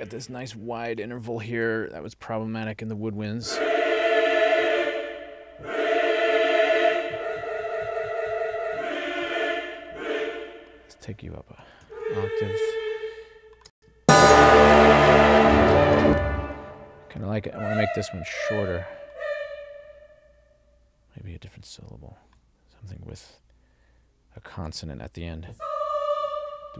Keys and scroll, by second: 11.9 alt+shift+Up, 13.7 space, 16.0 space.